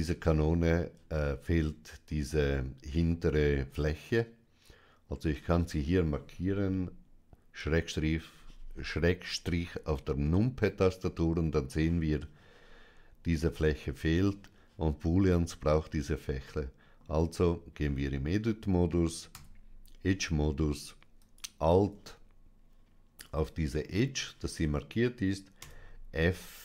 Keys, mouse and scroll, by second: 1.7 click, 3.6-4.9 middle drag, 10.1-11.6 middle drag, 16.4 middle click, 17.7 Tab, 19.2 2, 21.0 alt+click, 21.8 2, 23.0-24.2 middle drag, 25.4 f.